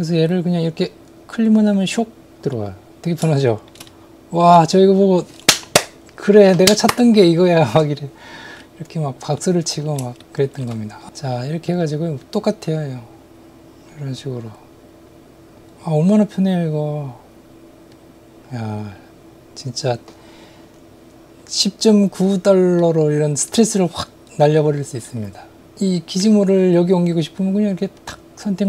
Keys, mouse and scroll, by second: 1.7 click, 2.5 middle click, 3.4 shift+middle click, 3.9 middle click, 9.4-10.7 middle drag, 11.1 middle click, 14.2-15.6 drag, 17.9-19.9 drag, 22.8-25.1 middle drag, 28.0 click.